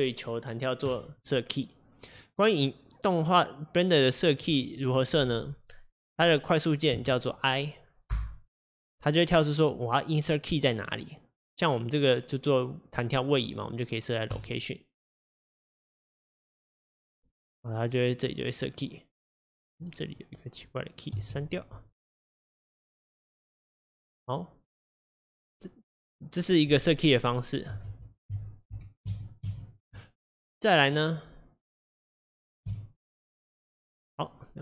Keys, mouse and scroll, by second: 18.7-28.0 drag, 28.0 ctrl+z, 28.4 ctrl+z, 31.2 click, 33.5 x, 34.3-34.6 drag.